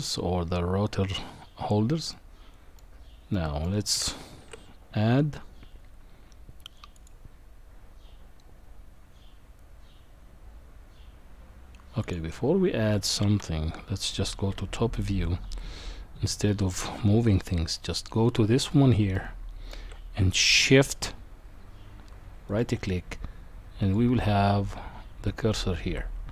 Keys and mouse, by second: 2.1 middle click, 3.3 middle click, 4.4 shift+a, 12.0 click, 13.4 KP_1, 14.5 KP_7, 16.2 shift+middle click, 19.2-19.7 shift+middle drag, 22.5 shift+right click, 23.8 shift+right click, 25.3 shift+right click.